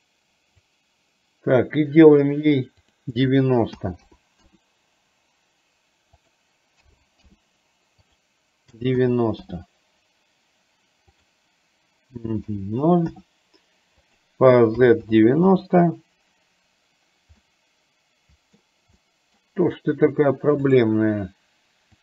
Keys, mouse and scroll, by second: 2.9-4.9 drag, 6.2-7.6 drag, 8.1-9.7 drag, 11.2-13.4 drag, 14.1-15.7 drag, 17.6-18.7 middle drag, 19.1 scroll up 1, 19.2 middle click, 19.4 scroll down 1, 20.7 click.